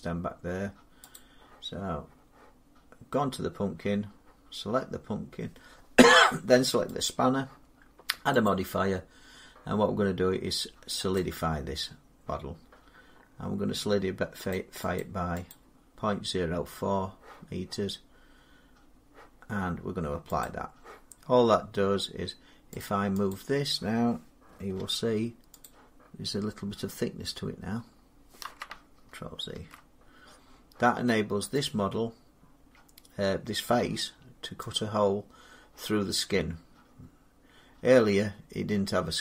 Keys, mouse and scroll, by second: 1.0 click, 6.9 click, 8.3 click, 11.0 click, 14.4 click, 14.8 click, 15.3 click, 20.3 click, 21.3 middle click, 21.3 middle click, 21.4 middle click, 22.6 click, 23.1 click, 24.6 g, 25.5 click, 26.1 middle click, 26.2 middle click, 27.7 middle click, 27.8 middle click, 27.9 scroll down 3, 29.4 ctrl+z, 29.9-30.5 scroll down 5, 31.5 middle click, 31.5 click, 34.6 click.